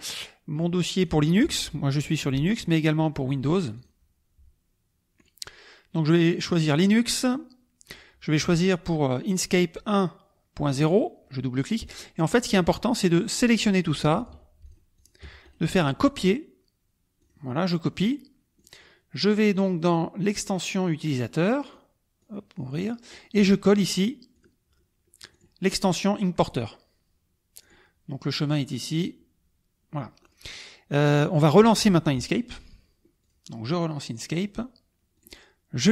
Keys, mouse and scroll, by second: 0.9 click, 2.5 click, 3.6 click, 5.1 click, 6.6 click, 10.8 click, 13.4-14.4 drag, 14.6 shift+click, 14.9 shift+click, 15.5 shift+right click, 17.2-18.1 drag, 18.5 click, 21.6 click, 22.2-23.3 drag, 23.3 right click, 24.3 click, 25.3-27.3 drag, 27.7 click, 31.3 click, 33.2 click, 34.1 click, 35.1 click.